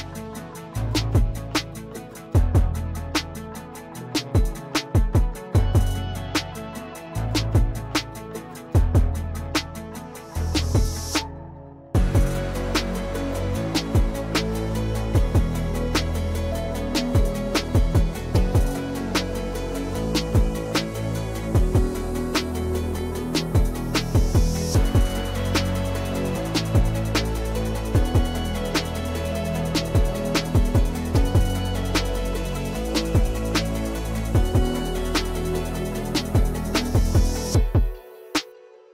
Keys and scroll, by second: 1.2 F3, 5.5 e, 11.7 \, 15.8 p, 17.3-18.5 typing, 24.3 \, 26.0 x, 33.8-34.7 typing.